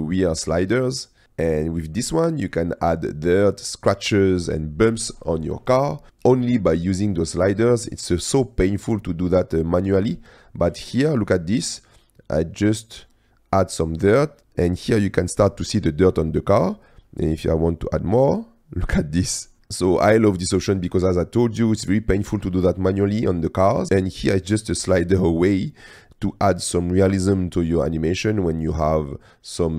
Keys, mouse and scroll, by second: 1.4 click, 2.6 click, 8.1 click, 11.4-13.0 drag, 14.2 click, 16.9-19.0 drag, 19.7 click, 20.8 click, 21.2-21.9 middle drag, 23.3 middle click, 23.5-24.2 drag, 25.5 click, 29.1-29.7 drag.